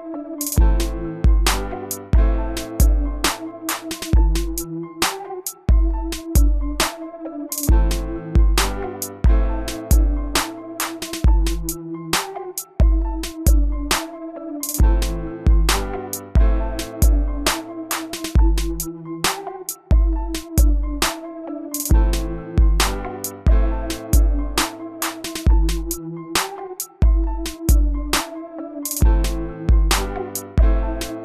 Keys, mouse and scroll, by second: 0.9 right click, 1.8 click, 4.5-5.2 scroll up 1, 5.2 scroll down 1, 6.2 click, 6.9-9.6 middle drag, 10.0 click, 23.9-26.6 middle drag.